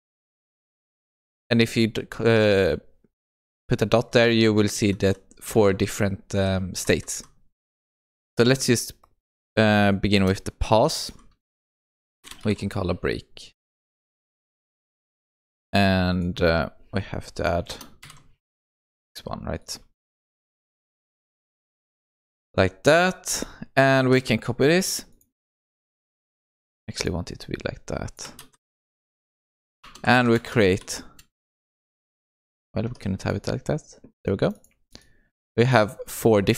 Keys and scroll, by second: 10.2 Return, 24.0 ctrl+c, 26.4 shift+Tab, 30.2 ctrl+v, 36.4 Tab.